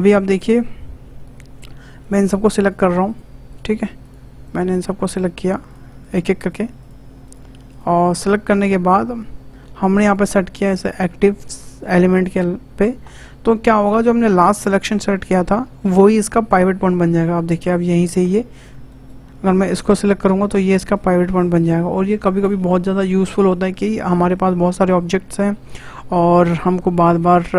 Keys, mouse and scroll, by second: 1.8 shift+scroll down 1, 2.0 shift+click, 2.6 shift+click, 3.0 shift+click, 3.5 shift+click, 4.0 shift+click, 4.4 shift+click, 5.0 shift+click, 5.6 shift+click, 6.0 shift+click, 6.4 shift+click, 6.8 shift+click, 7.2 shift+click, 7.7 shift+click, 8.2 shift+click, 10.1-13.1 drag, 17.0 s, 19.8 shift+click, 21.0 s.